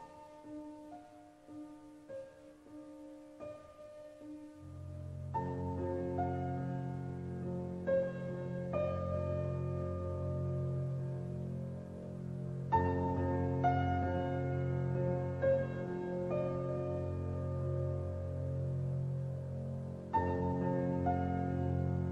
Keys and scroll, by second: 4.8 Up, 7.3 Up, 7.6 Down, 15.0 ctrl+shift+z.